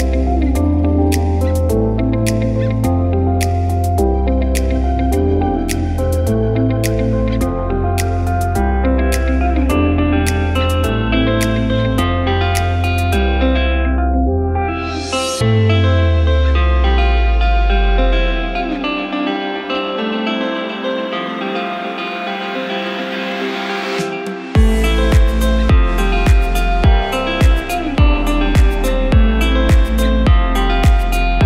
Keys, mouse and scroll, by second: 1.3 click, 2.6 click, 4.2 click, 5.6-6.7 scroll up 4, 7.3 click, 8.2 click, 8.4-9.0 scroll down 5, 9.0 Tab, 10.1 click, 12.8 click, 14.7 click, 15.5 click, 19.4 click, 21.5 click, 22.6 click, 23.3 click, 24.3 s, 28.1 click, 29.3 click, 30.0 right click, 31.0 click, 31.3 right click.